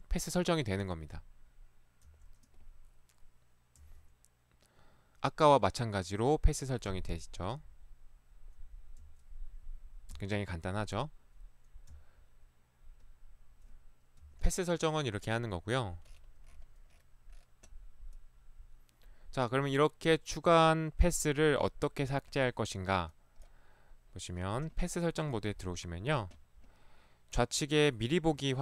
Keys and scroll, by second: 2.1 Right, 3.8 Right, 6.9 Right, 9.0 Right, 10.1 Right, 12.0 Left, 14.2 Escape.